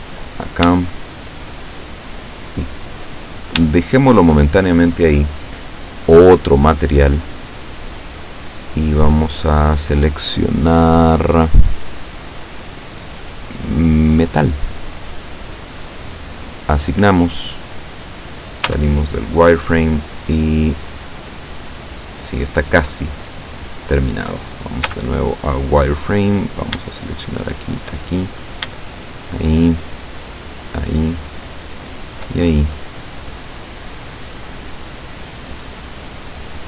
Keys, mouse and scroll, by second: 1.0 shift+middle click, 2.2-3.8 middle drag, 3.8 shift+middle click, 7.2 click, 9.6 click, 15.0 click, 16.6 click, 18.7 z, 24.9 z, 26.5 right click, 27.2 shift+right click, 27.6 shift+right click, 28.1 shift+middle click, 29.1 shift+right click, 30.1 shift+right click, 30.7 shift+right click, 31.4 shift+right click, 32.0 shift+right click, 32.5-33.6 shift+middle drag, 33.7-36.6 middle drag.